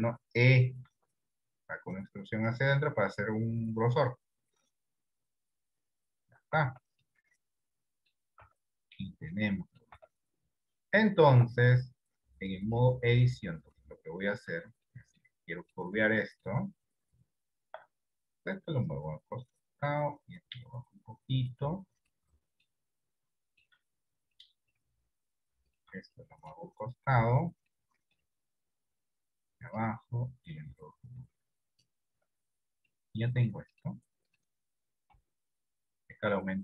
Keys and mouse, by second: 1.0 e, 6.8 Tab, 7.2 middle click, 8.4 Tab, 9.1 middle click, 10.0 Tab, 11.4 Tab, 14.9 middle click, 15.5 shift+middle click, 16.2 middle click, 18.7-20.0 drag, 20.7 click, 22.1 middle click, 23.5 shift+middle click, 24.5 middle click, 26.3 middle click, 27.8 middle click, 29.0 click, 30.6-31.8 drag, 32.2 Tab, 33.0 middle click, 35.3 KP_3.